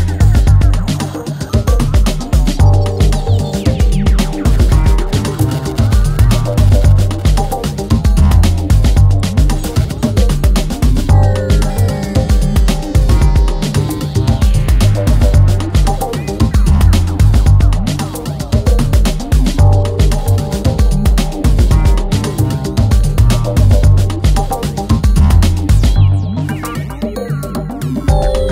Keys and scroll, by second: 2.7 F1, 3.2 F2, 4.2 ctrl+d, 4.3 Escape, 7.7 3, 7.9 ], 9.7 4, 10.1 Delete, 14.0 3, 21.3 4, 26.4 ctrl+z, 28.4 ctrl+z.